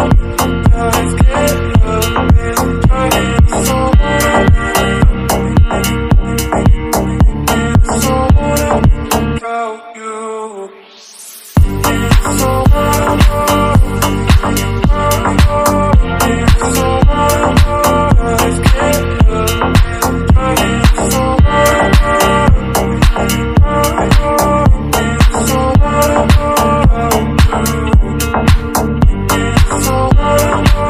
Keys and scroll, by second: 0.1 Down, 1.3 Up, 2.4 ctrl+t, 7.5 Right, 8.9 Right, 9.7 Right, 10.5 Down, 11.3 Left.